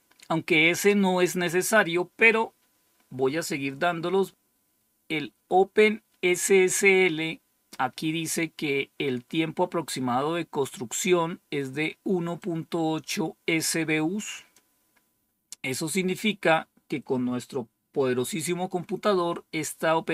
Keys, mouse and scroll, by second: 12.3-14.5 drag.